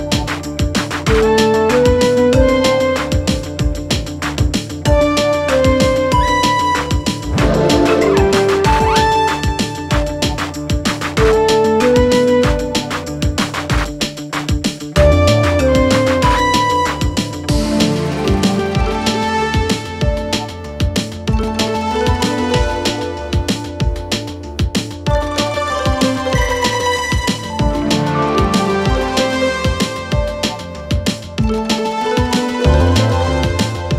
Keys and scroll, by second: 1.0 shift+f, 1.1 shift+r, 1.2 shift+e, 1.8 Return, 3.2 2, 3.4 5, 5.9 shift+5, 6.4 ctrl+space, 8.2 End, 10.0 Return, 14.9 shift+F2, 15.2 F3, 16.2 ctrl+k, 20.4 z, 22.4 F3, 22.9 ctrl+g, 23.4 c, 23.5 e, 27.7 F4, 30.6 F2, 31.7 shift+Page_Up.